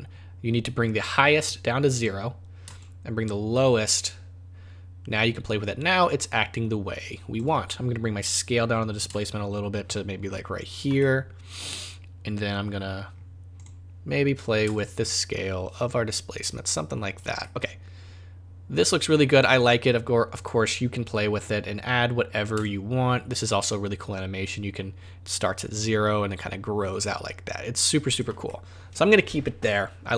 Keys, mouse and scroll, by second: 1.4 click, 2.8 shift+click, 8.3-9.0 scroll down 5, 9.2 shift+click, 11.0 middle click, 13.1-13.5 scroll down 4, 13.5 click, 14.8 shift+click, 17.4 middle click, 20.4 click, 21.3 click, 22.6 shift+click, 28.5 middle click.